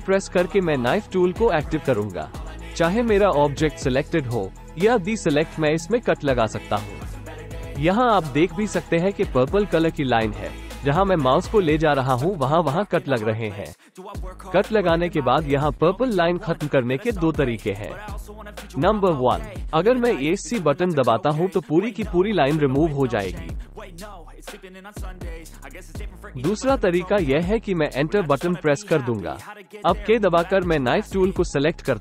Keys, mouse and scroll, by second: 23.9 alt+a, 23.9 k, 30.5 ctrl+z, 31.7 click.